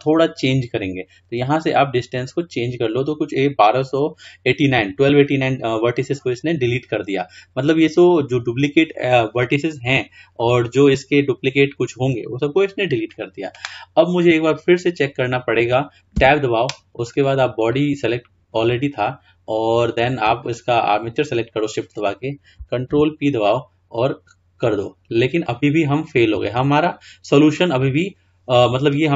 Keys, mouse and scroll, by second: 1.7-4.5 drag, 16.4 Tab, 17.2 click, 17.8 click, 20.5 shift+click, 23.0 ctrl+p.